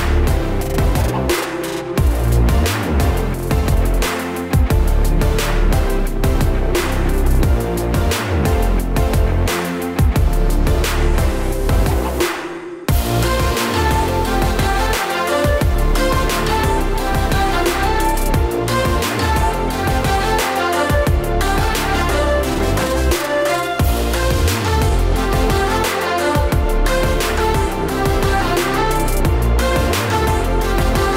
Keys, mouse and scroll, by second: 0.3 shift+a, 6.1 click, 8.8-9.1 scroll down 6, 9.4 scroll up 1, 10.1 scroll up 1, 10.1 KP_0, 10.8 click, 12.9 shift+a, 14.6-15.5 scroll up 11, 15.2 click, 15.5 click, 15.7-16.6 scroll down 21, 16.6 click, 16.6-17.2 scroll down 5, 17.2-17.8 scroll down 5, 17.5 middle click, 18.1 middle click, 18.1 scroll down 4, 18.9 click, 19.9-20.4 scroll up 6, 20.4-21.3 scroll down 2, 21.5 click, 21.5-21.9 scroll down 1, 21.9 click, 23.9 ctrl+z, 24.0 click, 24.8 middle click, 26.0 click, 28.1 click, 28.7 click.